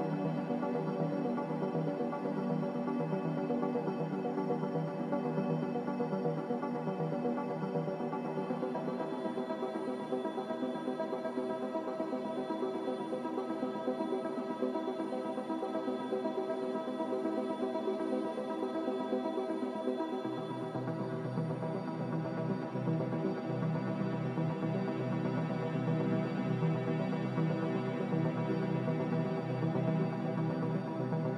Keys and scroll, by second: 3.8 a, 8.2 n, 10.1 ctrl+b, 13.7 ctrl+z, 16.4 ctrl+z, 16.5-17.3 typing, 20.3 Return, 23.8 ctrl+z, 27.9-28.7 typing.